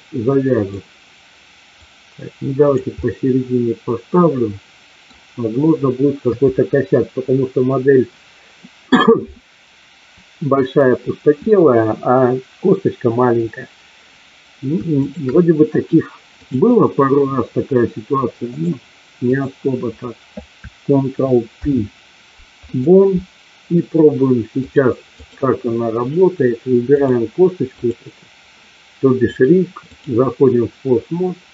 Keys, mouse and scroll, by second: 1.8-2.8 drag, 3.0-5.1 middle drag, 6.3 KP_3, 15.0 shift+click, 16.4-18.6 drag, 19.3 click, 21.4 ctrl+p, 24.6 click, 29.1 click.